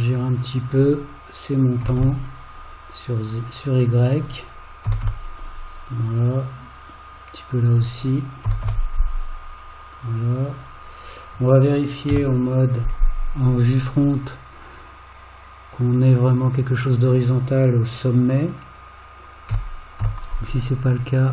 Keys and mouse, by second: 0.3 g, 0.4 click, 1.8 g, 3.8 click, 7.2 click, 8.5 g, 11.0 click, 12.1 KP_1, 16.3 click, 19.5 g.